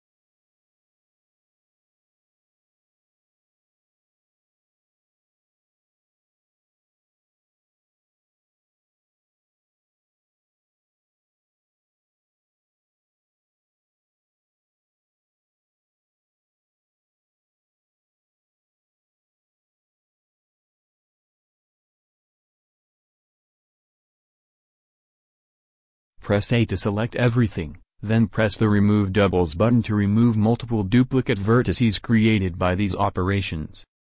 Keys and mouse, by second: 3.1 a, 3.3 a, 4.1 shift+d, 10.2 a, 10.4 a, 11.3 shift+d, 15.9 a, 16.1 a, 17.0 shift+d, 21.5 a, 21.8 a, 22.5 shift+d, 26.6 a, 26.8 a.